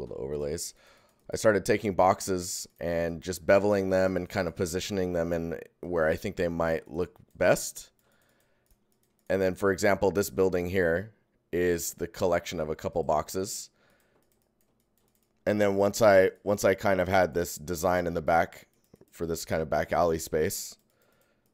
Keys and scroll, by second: 1.7 alt+g, 4.8 alt+g, 11.9 alt+shift+g.